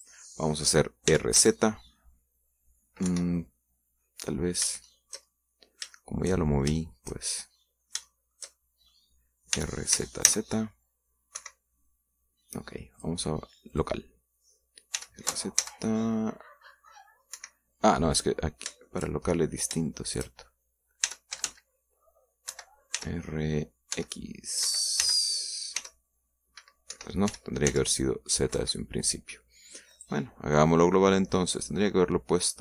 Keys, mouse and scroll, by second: 0.8 click, 2.0 r, 2.2 z, 3.9 Escape, 4.2-7.2 middle drag, 7.7-9.9 shift+middle drag, 10.4 r, 10.8 z, 12.2 Escape, 13.8 click, 14.6 click, 15.8 r, 16.4 z, 18.2 Escape, 19.4 scroll down 3, 19.7 shift+middle click, 20.4-20.7 scroll up 3, 20.7 shift+middle click, 21.9 r, 22.2 z, 23.4 Escape, 23.8 r, 24.8 x, 25.5 Escape, 25.9 r, 26.6 y, 27.8 Escape, 28.1 r, 28.6 z, 29.4 Escape, 30.8 click.